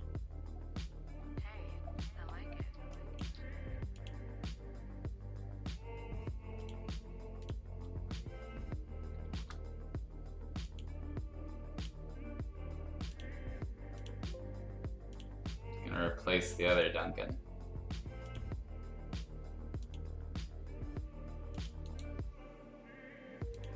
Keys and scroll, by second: 2.8 space, 9.2 ctrl+shift+s.